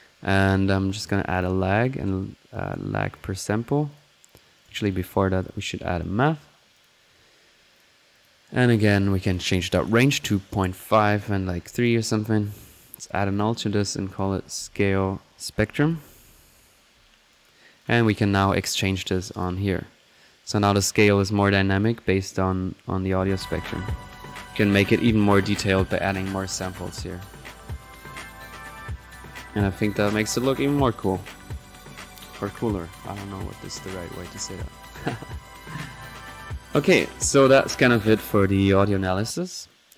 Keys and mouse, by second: 0.3-0.6 typing, 1.4 click, 1.8 click, 2.5-3.0 drag, 3.0-3.7 drag, 3.9 click, 4.5-4.9 right drag, 4.9 click, 5.7-6.5 typing, 6.0 drag, 6.8-7.8 drag, 9.2-10.3 drag, 11.0 click, 12.1 drag, 12.7 click, 13.3 alt+drag, 13.7 alt+click, 17.0 middle click, 17.3 click, 17.8 click, 18.5 click, 21.7 click, 23.0 click, 23.7 click, 23.7 right click, 24.9 click, 25.8-26.1 drag, 29.9 click, 31.6-32.4 drag, 32.8 click, 33.8-34.2 typing, 37.7 click, 39.1-39.6 drag, 39.7 click.